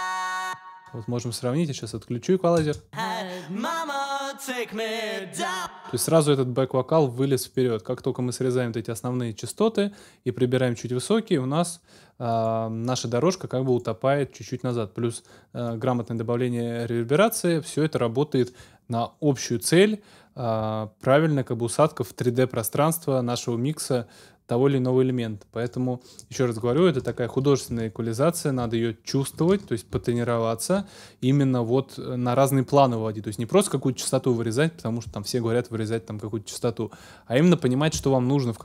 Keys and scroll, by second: 0.2 space, 2.6 space, 5.4 space, 27.0 super+s, 27.7 ctrl+super+s, 29.5 ctrl+alt+super+s.